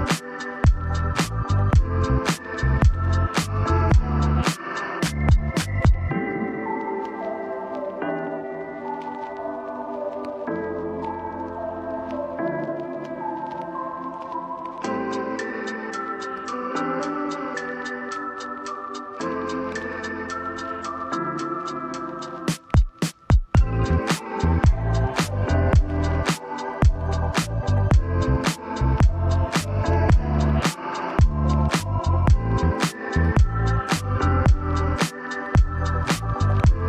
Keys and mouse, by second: 0.6 click, 1.3 click, 2.7 Escape, 3.4 click, 3.8 click, 4.8 c, 7.7 click, 8.3 Escape, 8.8 middle click, 9.6 g, 9.9 z, 11.3 Tab, 11.7 middle click, 12.6 shift+middle click, 12.9 middle click, 13.6 shift+middle click, 14.7 ctrl+2, 15.5-16.9 drag, 18.0 middle click, 18.5 middle click, 19.1 shift+middle click, 20.3-21.4 drag, 22.9 middle click, 23.9 middle click, 24.3 middle click, 24.9 shift+middle click, 25.2 middle click, 25.7 shift+middle click, 26.2 shift+middle click, 27.3-28.4 middle drag, 28.7 shift+middle click, 29.2 middle click, 31.6 shift+middle click, 32.3 shift+middle click, 33.0 shift+middle click, 33.6 shift+middle click, 34.3 shift+middle click, 35.3 shift+middle click.